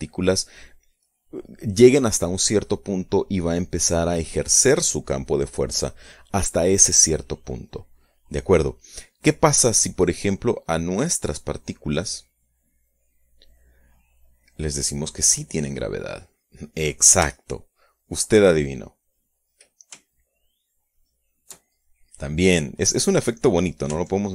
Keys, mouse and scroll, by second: 11.1 click, 13.3 click, 14.9 click, 15.5-16.5 drag, 17.9-19.5 shift+middle drag, 20.9-22.5 shift+middle drag, 22.5-24.1 drag.